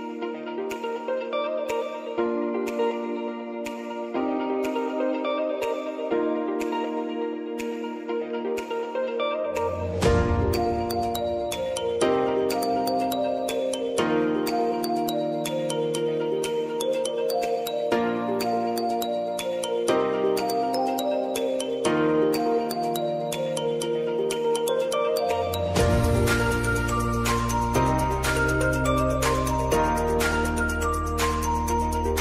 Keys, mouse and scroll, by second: 0.1 click, 4.2 Return, 6.0-8.7 drag, 8.7 scroll up 1, 9.6 click, 12.2 click, 13.1 shift+click, 14.0 ctrl+shift+c, 15.3-17.9 typing, 18.9 click, 19.2 space, 21.5 click, 21.9 space, 25.2 click, 27.7 click.